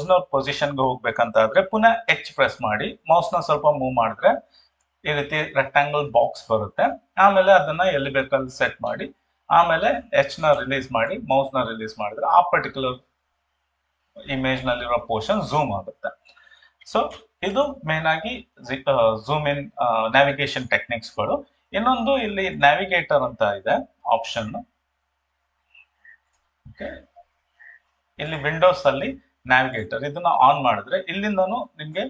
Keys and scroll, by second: 2.1 h, 17.2 ctrl+0.